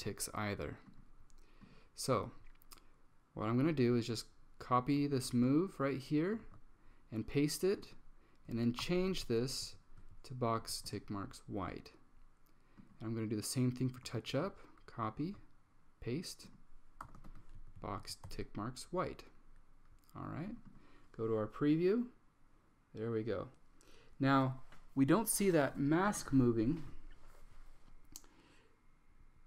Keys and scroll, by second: 5.2 super+c, 6.5 super+v, 8.7-9.7 typing, 9.8 Down, 10.1 Down, 10.7 Up, 11.0 Return, 14.4 super+c, 15.3 super+v, 16.9-18.4 typing, 17.9 Down, 20.1-20.9 typing.